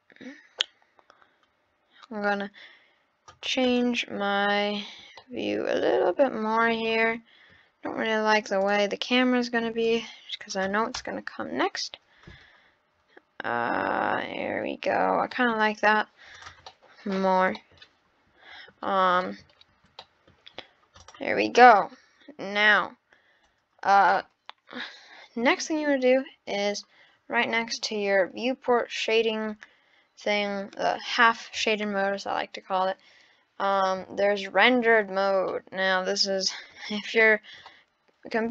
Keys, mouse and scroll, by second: 5.2-6.1 shift+middle drag, 6.5 scroll down 8, 7.0-7.5 middle drag, 8.6 click, 9.8 click, 11.0 KP_0, 12.4-13.2 scroll up 11, 14.3-14.7 scroll down 2, 15.3 middle click, 15.6 scroll down 6, 16.4 click, 16.7 middle click, 17.2 scroll up 2, 17.6-20.5 shift+middle drag, 20.5-21.0 scroll down 2, 21.0 click, 21.5-22.7 scroll up 2, 21.6 middle click, 33.9 click, 35.2 scroll up 1, 35.5-36.8 middle drag, 36.8-37.6 scroll down 5, 37.7-38.5 middle drag.